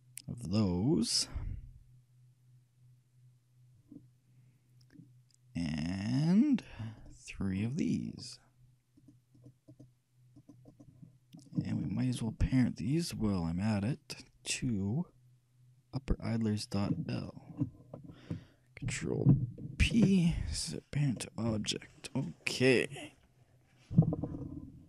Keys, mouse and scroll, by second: 7.2-9.0 right drag, 9.2-13.7 drag, 13.6-14.9 shift+middle drag, 17.4-19.1 shift+drag, 20.0 ctrl+shift+p.